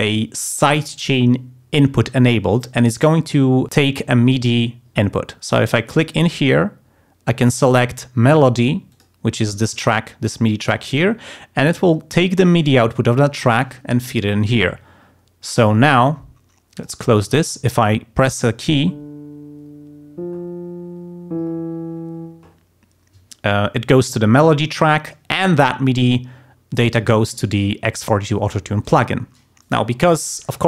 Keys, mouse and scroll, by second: 6.1 click, 8.9 click, 16.7 click.